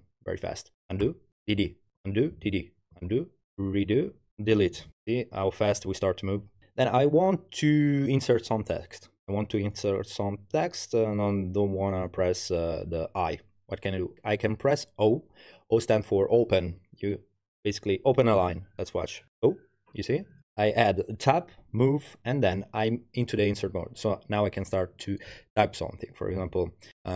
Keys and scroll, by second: 0.8-3.1 typing, 3.9 ctrl+r, 4.5 typing, 19.3 o, 26.1-27.1 typing.